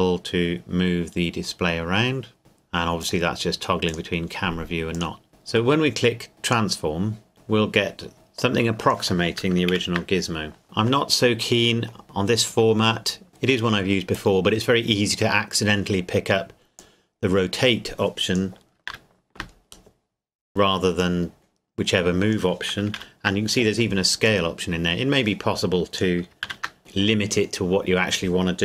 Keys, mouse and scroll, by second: 6.5 click, 9.7 ctrl+z, 10.6 middle click, 12.0-12.7 scroll up 1, 16.8 click, 18.9 ctrl+z, 21.0 click, 23.0 ctrl+z, 24.3 click, 26.6 ctrl+z.